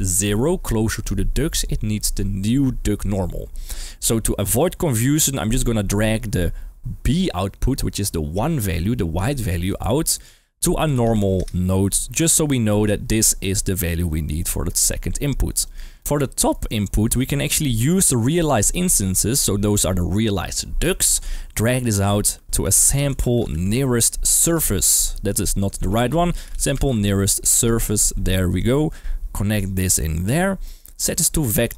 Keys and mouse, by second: 4.3 middle click, 5.4-9.7 drag, 13.1 click, 14.0 g, 15.6 click, 15.9 middle click, 16.5 middle click, 17.2 middle click, 18.4 middle click, 21.3-21.9 drag, 25.4 Escape, 25.9 shift+a, 28.5 click, 29.5-30.3 drag, 30.6 middle click, 31.0-31.7 drag.